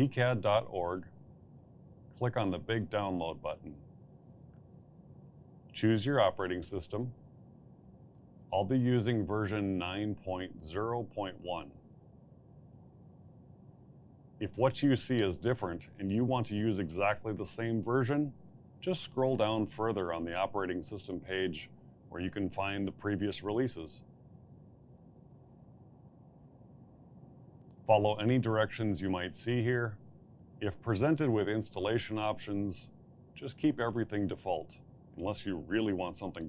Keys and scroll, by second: 0.0-0.5 typing.